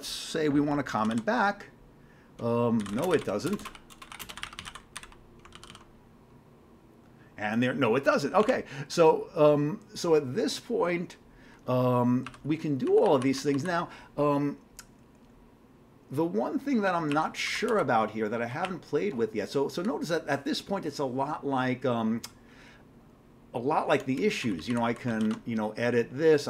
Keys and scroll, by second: 0.9 ctrl+c, 1.1 ctrl+n, 2.6-6.2 typing, 8.5 alt+Tab, 12.3 q, 13.1 Down, 13.2 Down, 13.4 Down, 17.1 Up, 18.5 Down, 18.6 Up, 19.1 Up, 24.4 Down, 24.7 Down, 25.1 ctrl+c, 25.2 ctrl+e.